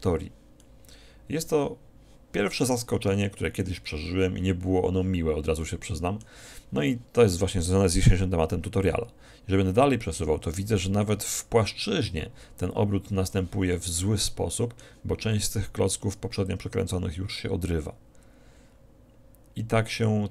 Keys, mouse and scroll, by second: 0.7-2.7 middle drag, 5.7-7.4 middle drag, 8.9-10.7 drag, 13.8-15.5 middle drag, 16.5-18.5 drag.